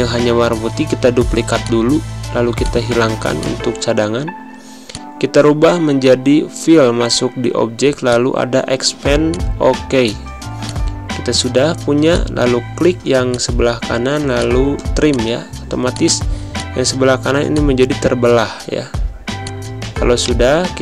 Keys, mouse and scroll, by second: 3.2 click, 3.3 click, 7.9 click, 16.1 z, 16.4 click, 17.1 space, 17.4 click, 17.5 space, 19.3 click, 20.1 right click.